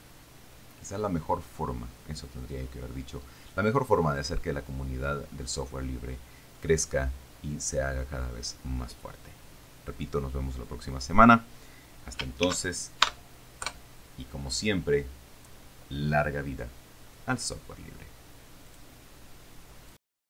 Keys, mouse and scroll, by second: 12.7 ctrl+shift+s, 13.3 ctrl+shift+KP_Add, 13.9 KP_Enter, 18.9 click, 20.2 click.